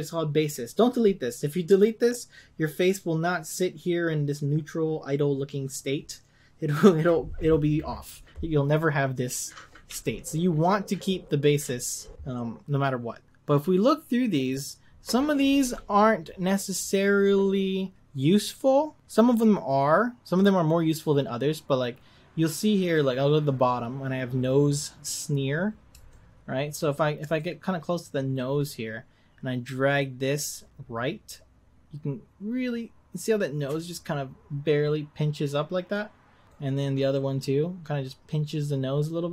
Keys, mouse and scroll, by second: 26.1-26.8 shift+middle drag, 26.8 scroll up 2, 27.4-30.7 shift+middle drag, 30.7-32.8 drag, 37.4-39.3 drag.